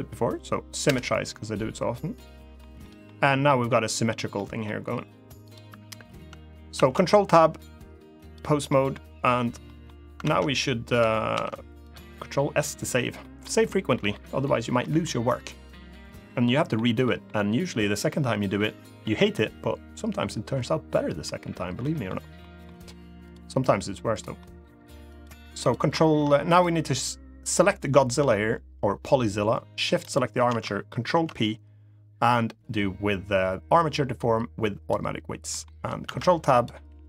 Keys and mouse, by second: 1.9 middle click, 2.5 middle click, 3.2 middle click, 4.1 middle click, 5.2 click, 6.5 ctrl+Tab, 8.4 middle drag, 9.4 middle click, 10.0 ctrl+Tab, 11.1 ctrl+s, 11.6 drag, 12.9 middle click, 13.7 middle click, 14.5 middle click, 16.2 middle drag, 16.8 middle drag, 18.8 middle click, 20.6-21.0 middle drag, 21.6 middle click, 22.1 middle click, 23.0 click, 23.9 middle drag, 24.8 click, 26.3 click, 29.7 shift+click, 30.9 ctrl+p, 35.2 middle click, 35.8 ctrl+Tab, 36.6 g.